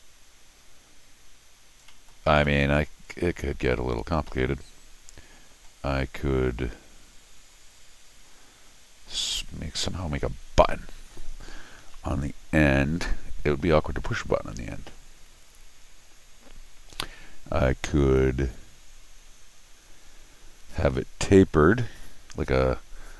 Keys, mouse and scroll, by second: 1.9 middle click, 2.3 scroll down 1, 2.4 middle click, 2.7 scroll up 1, 3.1 middle click, 4.3-5.6 middle drag.